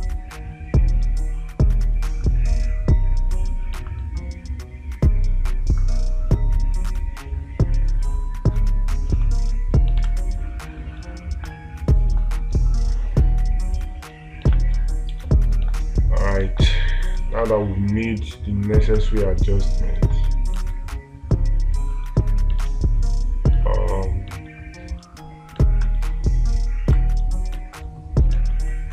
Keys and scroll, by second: 10.5 space, 16.9 space, 23.1 space, 27.4 space.